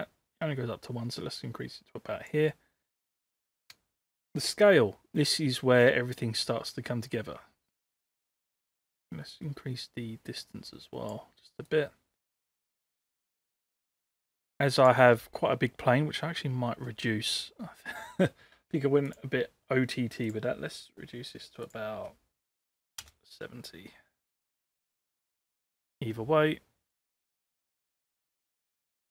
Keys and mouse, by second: 5.4-8.1 drag, 8.8-11.2 drag, 11.7-15.0 drag, 16.3 middle click, 19.1 click, 20.4-24.7 drag, 25.1 ctrl+c, 25.4 ctrl+v, 26.9-29.1 drag.